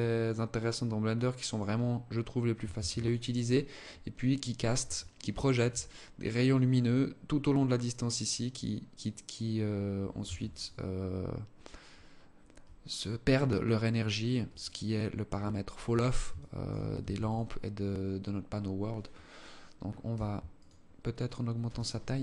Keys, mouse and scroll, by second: 2.0 ctrl+s, 4.3 alt+click, 5.6 right click, 9.5 ctrl+s, 13.8 alt+click, 14.8 scroll up 1, 14.9 scroll down 1, 15.6 alt+shift+click, 16.2 ctrl+s, 19.9 right click.